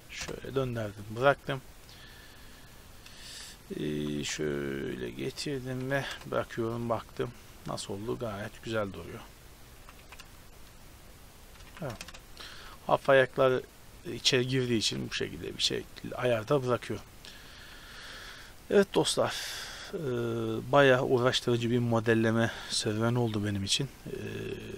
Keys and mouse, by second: 1.7-3.6 drag, 3.6 middle click, 4.0 g, 6.1 KP_0, 8.4-11.5 drag, 9.9 g, 11.7 a, 12.0 shift+space, 14.9 ctrl+s, 17.9 ctrl+s, 21.6 click, 22.1-23.9 middle drag.